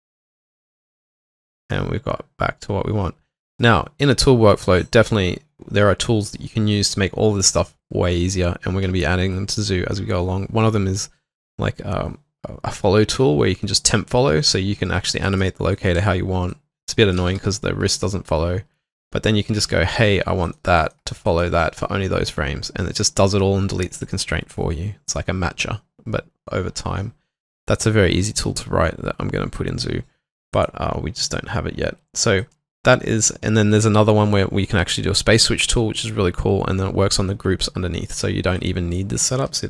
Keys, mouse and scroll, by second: 15.7 double click, 16.0 typing, 20.8 double click, 21.3 shift+click.